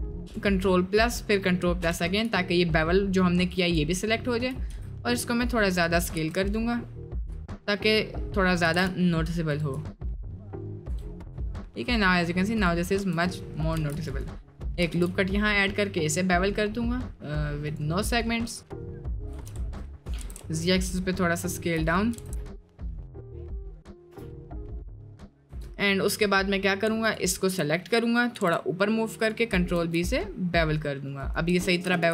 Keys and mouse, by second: 0.1 ctrl+KP_Add, 3.5 click, 4.0 shift+middle click, 4.7 s, 6.0 s, 8.6 s, 9.7 click, 10.2 middle click, 10.9 Tab, 11.3 drag, 11.5-12.3 middle drag, 13.4 middle click, 13.9 ctrl+r, 14.4 middle click, 18.0 middle click, 18.7 middle click, 19.2 d, 19.3 x, 20.2 s, 22.2 s, 24.0 click, 24.1 Tab, 24.3 middle drag, 24.8 middle drag, 25.2 middle drag, 25.9 Tab, 25.9 middle click, 26.2 middle click, 28.3 g, 29.8 ctrl+b, 31.5 Tab, 31.9 ctrl+a.